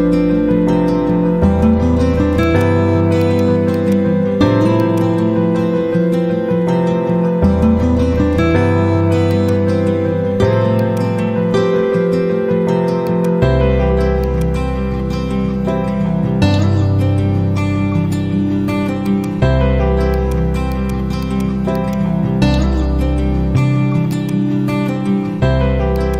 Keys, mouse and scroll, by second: 2.4-7.2 drag, 10.0 F4, 10.7 click, 13.0 click, 15.0 shift+l, 16.0 Return, 16.7 shift+h, 18.9-23.5 drag, 25.4 z, 25.9-26.1 drag.